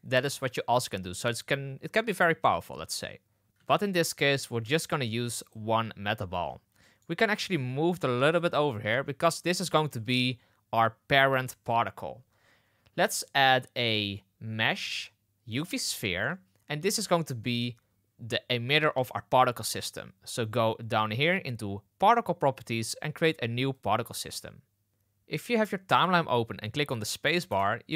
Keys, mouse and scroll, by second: 3.4 ctrl+z, 3.4 x, 3.4 shift+s, 4.2 shift+a, 6.8 middle drag, 7.3 g, 8.6 shift+middle drag, 12.9 shift+a, 15.9 shift+middle drag, 21.9 click, 23.6 click, 24.9 space, 27.4 space.